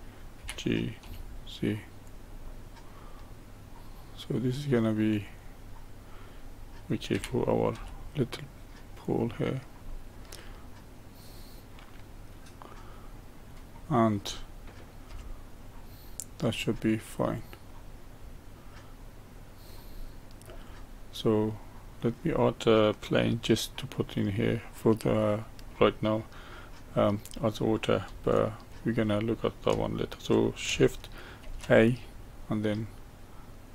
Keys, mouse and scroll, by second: 0.3 g, 2.5-5.2 middle drag, 5.2 click, 5.7-7.1 middle drag, 7.1 g, 9.9-12.9 middle drag, 15.1 Tab, 15.6-17.2 middle drag, 17.2 click, 17.7-20.0 middle drag, 20.0 scroll down 1, 20.6-23.6 middle drag, 24.4-31.4 middle drag, 31.4 shift+a.